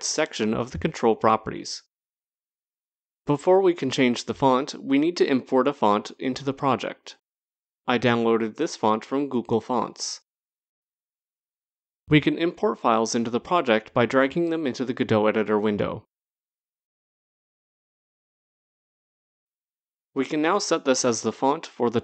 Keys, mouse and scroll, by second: 1.0 click, 1.5 scroll, 3.2 scroll, 3.6 click, 7.2 click, 10.3 click, 13.7 click, 17.7 click.